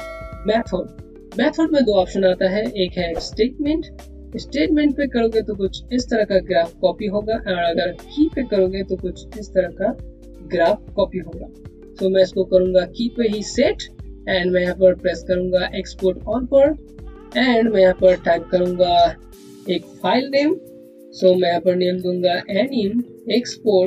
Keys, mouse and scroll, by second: 1.2 click, 7.7 click, 16.2 click, 21.9-23.8 typing.